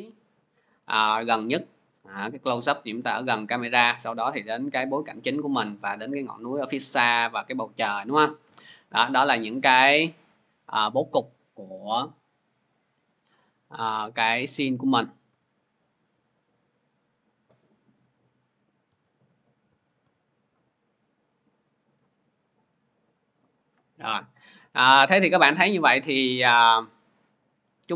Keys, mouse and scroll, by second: 10.0-14.1 drag, 14.1 c, 15.1 click, 15.6-15.9 typing, 16.8 click, 18.2 click, 18.4 typing, 21.6 click, 25.0 typing.